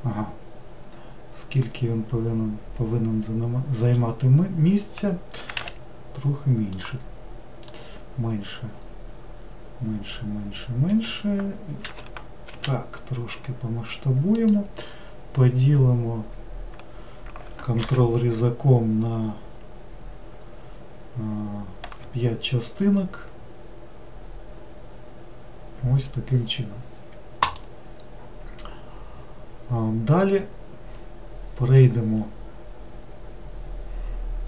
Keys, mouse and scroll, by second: 5.4 s, 7.7-10.8 middle drag, 11.8 s, 17.8 ctrl+r.